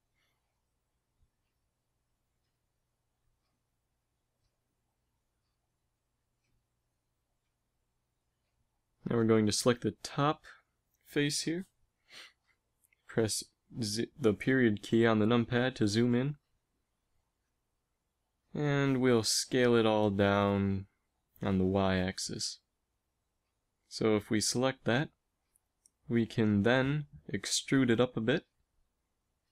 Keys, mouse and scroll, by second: 1.1 ctrl+Tab, 2.1 z, 2.4 a, 2.7 b, 3.4 g, 4.6 b, 5.1 a, 5.1 b, 5.3-6.7 drag, 5.7 g, 7.2 a, 9.3 b, 11.4 a, 12.0 b, 13.1 KP_Decimal, 16.9 a, 17.0 a, 18.1 s, 22.0 a, 22.8 click, 23.2 z, 23.7 click, 27.6 e.